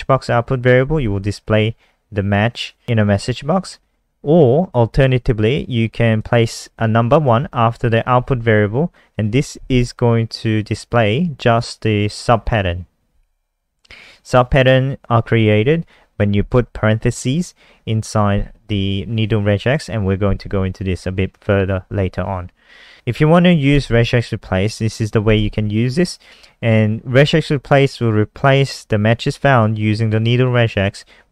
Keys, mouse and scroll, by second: 22.6 scroll down 1, 23.4 click, 23.6 click, 29.3 click, 29.5 click.